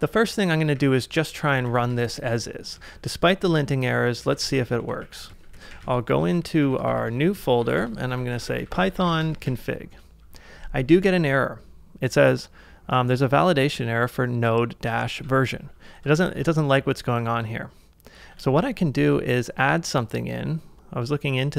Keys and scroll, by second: 0.8-2.1 typing, 3.0 ctrl+a, 3.5-6.0 typing, 16.2 ctrl+a, 18.5 super+Tab.